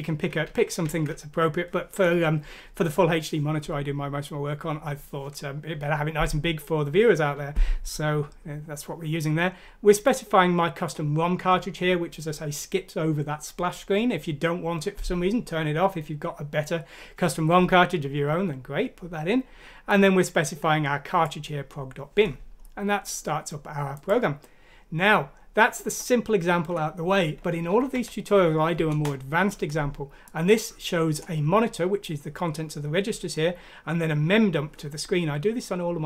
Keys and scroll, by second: 0.4 ctrl+z, 0.8 ctrl+z, 27.9 F6, 28.9 Return.